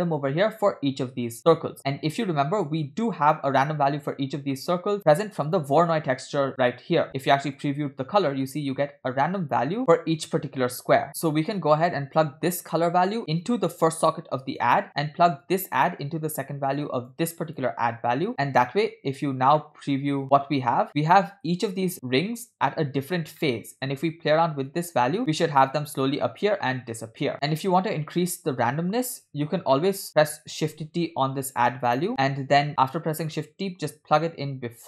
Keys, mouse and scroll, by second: 4.4 scroll down 2, 4.5-5.0 middle drag, 5.0 scroll up 3, 5.5 drag, 7.1 click, 7.8 ctrl+shift+click, 11.1 middle click, 11.1-11.4 scroll down 2, 12.8-14.2 drag, 14.5 click, 15.5-17.2 drag, 17.5 click, 18.3 middle click, 18.3 scroll down 3, 19.6 middle click, 20.3 ctrl+shift+click, 21.0 middle click, 21.0 scroll up 3, 21.4 scroll down 3, 23.2-24.2 scroll up 4, 23.4 middle click, 24.7-29.1 shift+drag, 29.5 scroll down 1, 29.8 middle click, 30.1 click, 30.9 shift+s, 32.3 shift+d.